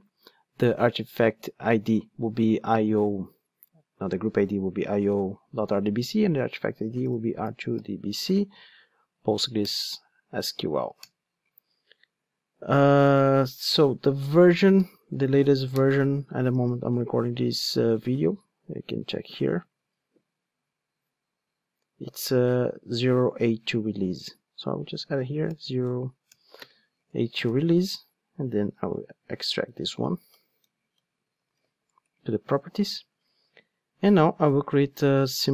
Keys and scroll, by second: 10.0 Return, 15.8 Return, 26.6 ctrl+space, 27.4 super+z, 29.0 alt+shift+Left, 31.5 alt+super+v.